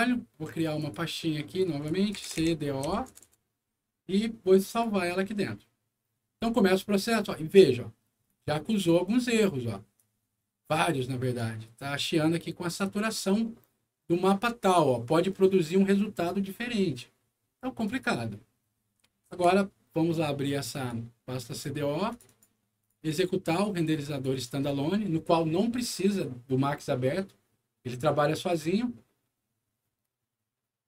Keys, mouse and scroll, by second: 0.8 click, 1.4 click, 1.9-3.3 typing, 4.6 click, 8.2 click, 9.9-11.3 drag, 17.8 click, 19.3 super+e, 20.7 click, 21.5 click, 22.1 click, 22.2 click, 22.8 click, 24.1 click, 24.3 click.